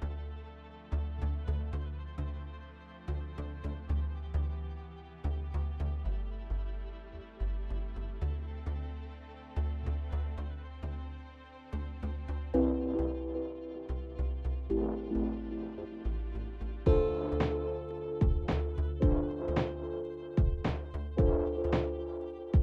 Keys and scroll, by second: 3.4 ctrl+c, 7.2 ctrl+v, 13.9 ctrl+s, 14.3 ctrl+s, 14.6 ctrl+s, 15.0 ctrl+s, 15.0 ctrl+s, 18.4-19.4 typing.